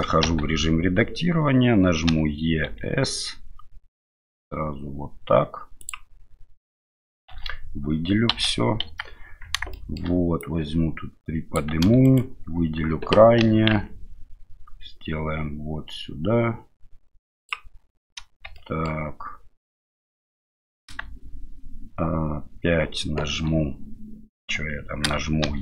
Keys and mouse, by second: 0.2 1, 2.1 e, 7.3 a, 8.3 a, 8.8 KP_1, 9.7 shift+middle click, 10.4-11.6 drag, 12.0 alt+right click, 13.4 e, 18.6 shift+right click, 25.5 e.